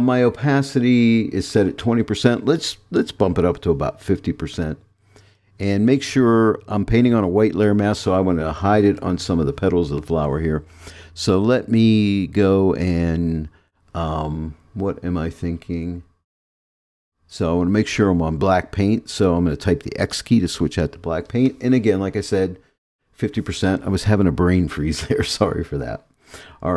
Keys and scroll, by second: 4.5 5, 20.0 x.